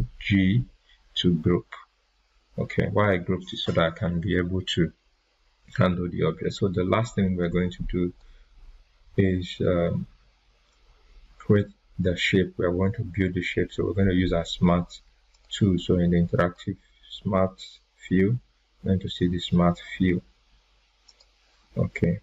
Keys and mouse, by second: 7.4-8.3 drag, 15.3 click, 21.0 click.